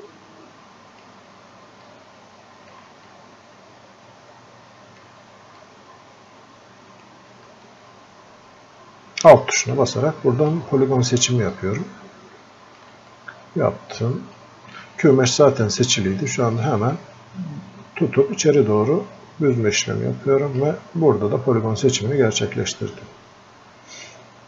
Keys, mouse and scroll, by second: 1.9 alt+click, 3.1-5.6 drag, 5.6-7.7 drag, 7.7-9.7 alt+drag, 10.0 click, 11.8-13.1 alt+drag, 13.4-14.7 drag, 15.3-16.9 drag, 16.9-21.0 drag, 21.0 scroll up 1, 21.9-24.4 drag.